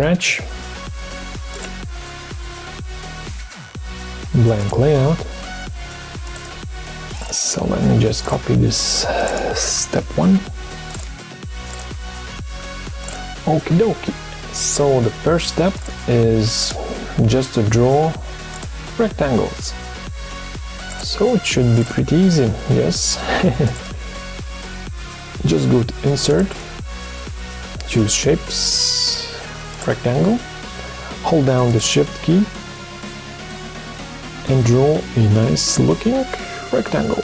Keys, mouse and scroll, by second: 10.1 ctrl+c, 12.3 ctrl+v, 31.8 shift+click.